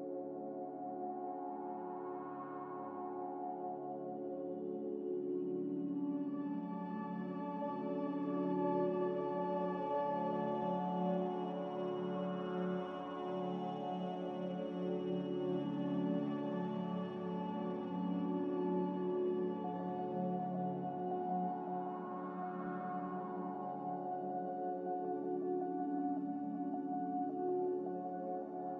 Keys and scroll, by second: 2.1 m, 6.2 F9, 8.3 Escape, 10.0 z, 11.2 b, 12.0 Delete, 15.6 ctrl+z, 16.1 ctrl+z, 16.4 ctrl+z, 17.8 b, 18.5 Delete, 21.3 Delete, 21.9 m, 24.0 b.